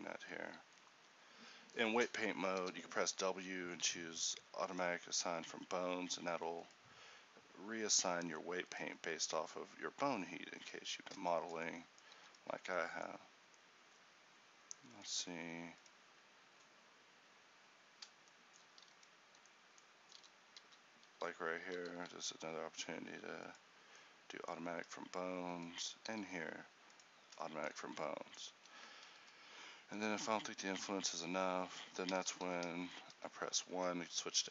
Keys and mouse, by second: 2.7 w, 11.5-18.0 middle drag, 20.2 e, 20.6 e, 22.0 w, 26.2 w, 32.4 ctrl+z, 33.2 1.